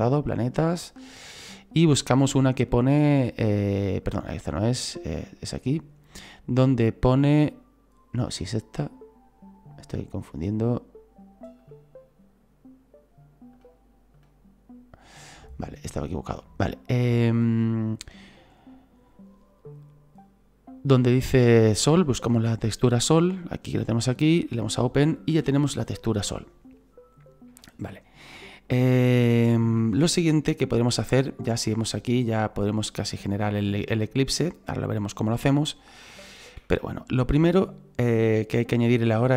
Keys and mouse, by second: 4.1 click, 5.3 click, 9.9 click, 11.6 click, 13.5 click, 22.9 click, 24.4 click, 28.3 shift+middle click, 29.4 shift+middle click, 33.0 middle click, 34.7 middle click, 36.3 shift+middle click.